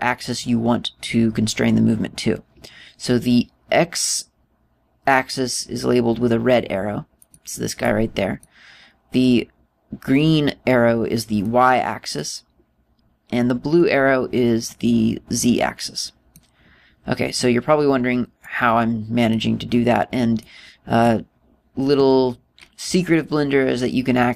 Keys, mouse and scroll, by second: 0.1 middle click, 7.8 click, 8.4 click, 12.0 click, 16.1 click, 19.1 click, 21.0 click.